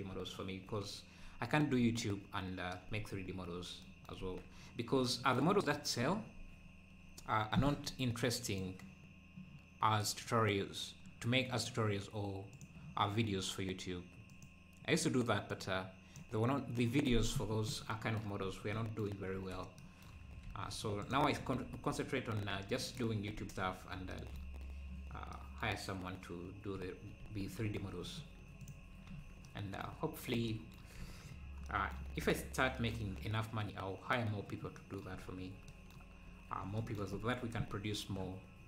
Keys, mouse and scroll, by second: 0.1 ctrl+s, 3.3-3.8 scroll down 2, 4.2 ctrl+s, 18.4-18.7 scroll up 4, 19.4 ctrl+s, 20.5 ctrl+s, 21.0 click, 23.4 ctrl+s, 27.3 ctrl+s, 28.6 click, 29.1 ctrl+s, 31.0 ctrl+s, 31.3 scroll down 4, 32.2 ctrl+s, 33.5 scroll down 1, 34.7 scroll down 2, 35.2-35.6 scroll up 1, 37.9-38.6 scroll down 4.